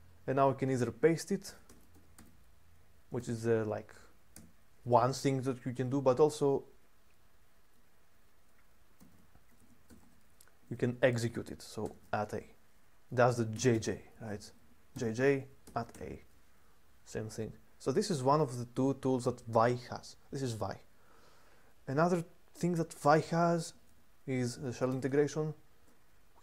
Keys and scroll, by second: 1.2-4.1 typing, 8.7-12.2 typing, 13.2-15.7 typing, 23.4 typing, 24.6 typing.